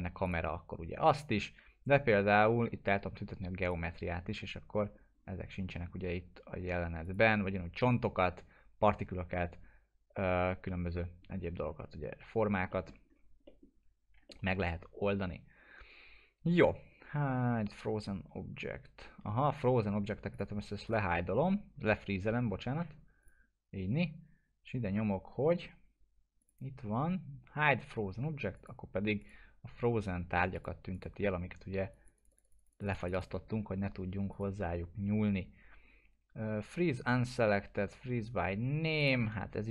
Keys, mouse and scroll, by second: 0.2 click, 3.6 click, 5.1-7.0 scroll down 1, 7.0 click, 12.7 middle click, 13.1-13.5 scroll up 1, 13.5 middle click, 14.0 scroll up 1, 14.3-16.8 alt+middle drag, 20.3 click, 20.8 right click, 23.2 click, 26.4 click, 39.0-39.7 drag.